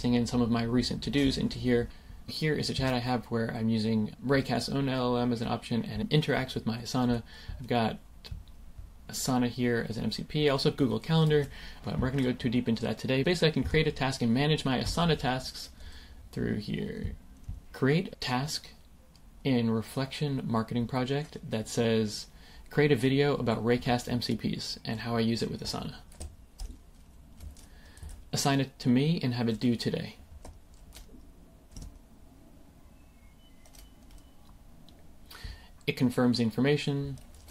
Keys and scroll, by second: 17.5 typing, 26.9 super+v, 30.8 super+v, 31.7 Return.